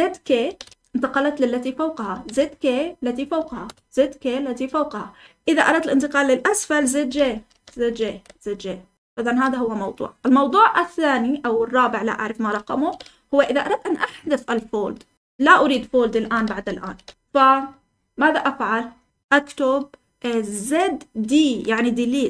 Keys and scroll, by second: 0.2-4.1 typing, 6.8-8.7 typing, 15.7 Escape, 16.2-16.8 typing.